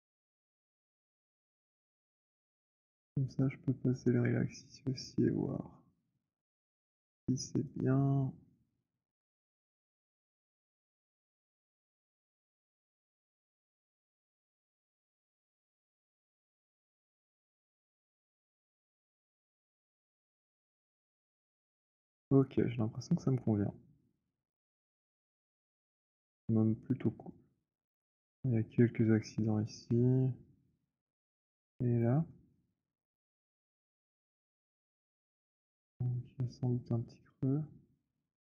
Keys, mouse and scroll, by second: 0.5 click, 4.9 click, 6.5 click, 8.5 click, 11.3 alt+click, 13.5 click, 15.5 alt+click, 16.3 alt+click, 18.1 click, 19.9 click, 21.4 middle click, 21.9 click, 21.9 w, 22.2-22.8 scroll, 22.8 middle click, 23.1 click, 26.0 alt+click, 26.6 alt+click, 28.1 click, 29.6 alt+middle click, 30.1 alt+scroll, 30.7 alt+click, 31.8 alt+click, 32.6 alt+middle click, 33.9 alt+middle click, 33.9 alt+click, 34.1 alt+right click, 34.6 alt+click, 35.4 click.